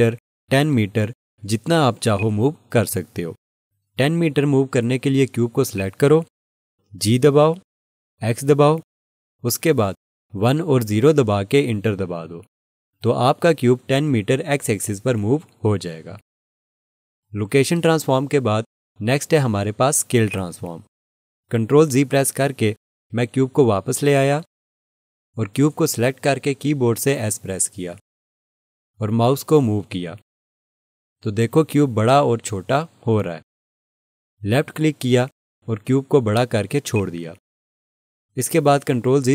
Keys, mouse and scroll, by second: 1.1 ctrl+z, 2.2 click, 5.8 click, 8.7 x, 10.7 1, 11.0 0, 12.3 Return, 19.6 ctrl+z, 20.3 click, 26.3 click, 36.9 click.